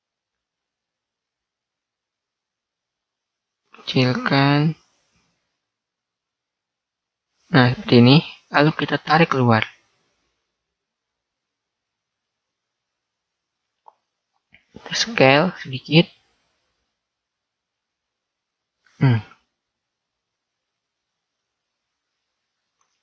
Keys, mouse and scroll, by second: 9.4 click, 12.2-13.7 middle drag, 14.5 s, 19.5 middle click, 20.3 middle click.